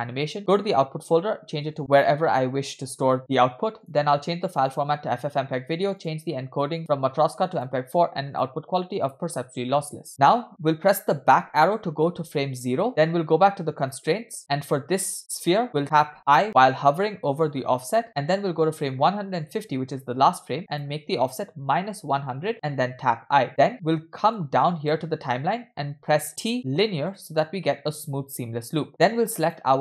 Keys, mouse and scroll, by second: 0.3 scroll down 1, 0.4-1.7 drag, 1.5 /, 3.8-4.9 drag, 5.3-6.0 scroll down 1, 6.0-6.7 scroll down 3, 6.0 click, 6.9-7.8 drag, 8.3-9.2 drag, 9.7-10.1 scroll down 2, 10.1 scroll up 10, 12.8 Left, 13.8 click, 19.5 click, 20.7-22.5 drag, 22.5 0, 23.0 i, 24.4 click, 26.6 t, 29.5 click.